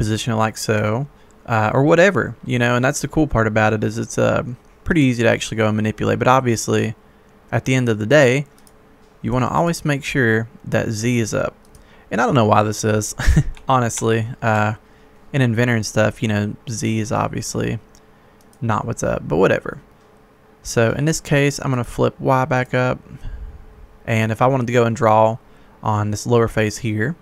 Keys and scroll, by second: 0.8 Escape, 13.6 ctrl+z, 13.9 ctrl+z.